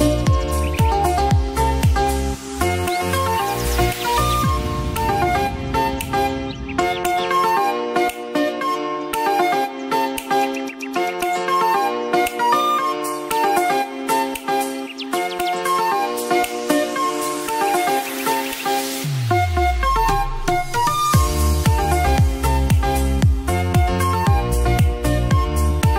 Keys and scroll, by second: 7.1 b, 13.8 ctrl+z, 20.2 ctrl+g, 21.4-23.1 typing, 23.2 Return, 24.4 ctrl+j.